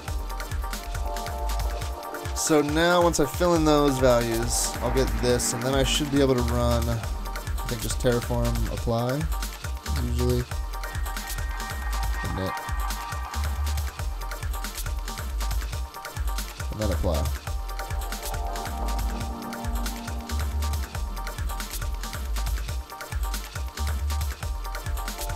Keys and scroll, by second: 6.6 super+Tab.